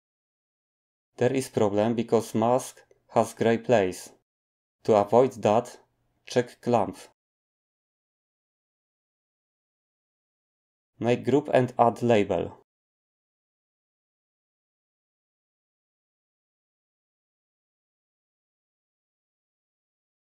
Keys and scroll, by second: 15.5 ctrl+g, 17.3 Tab, 19.3-20.3 typing.